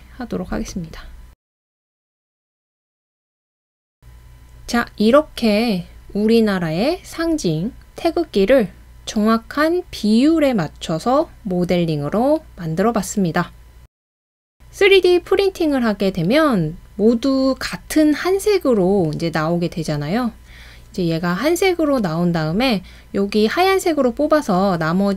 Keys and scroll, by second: 2.1 typing.